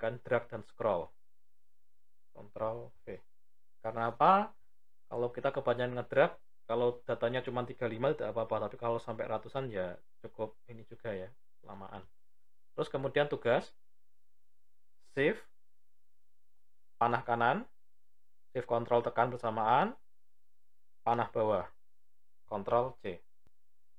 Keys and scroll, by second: 2.2 ctrl+v, 15.0 shift+Right, 18.4 ctrl+shift+Down, 22.4 ctrl+c.